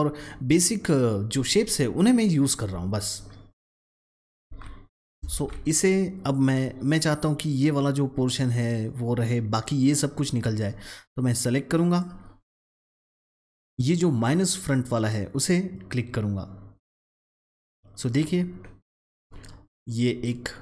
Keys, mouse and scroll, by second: 4.4 ctrl+z, 5.2 ctrl+shift+z, 6.2 click, 10.5-11.9 drag, 13.4 ctrl+z, 17.0-20.6 drag.